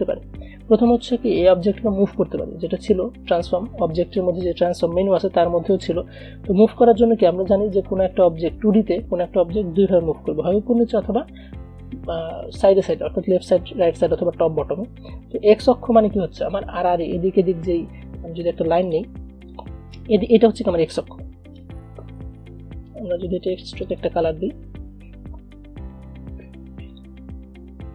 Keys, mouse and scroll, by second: 6.2 click, 6.3-23.5 drag, 24.0 click, 27.0 click.